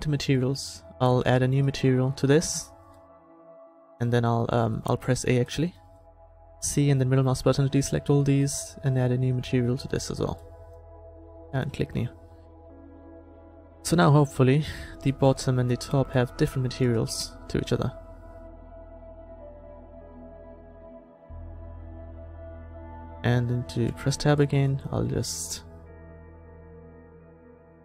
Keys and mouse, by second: 2.7 click, 3.4 middle click, 4.0 a, 5.0 a, 6.1 c, 10.5-14.0 middle drag, 14.0-15.2 drag, 16.9-18.8 drag, 21.1 middle click, 21.5 Tab, 24.0 Tab, 26.6-27.8 drag.